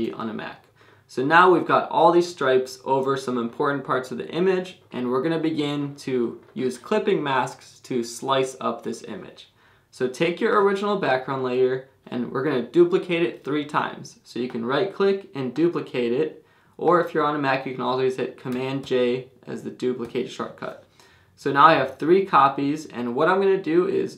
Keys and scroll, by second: 18.8 super+j.